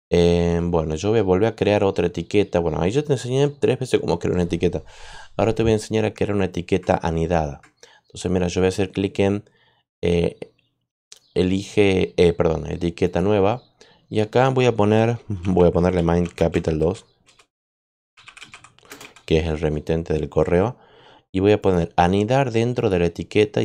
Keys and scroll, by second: 15.0-19.4 typing.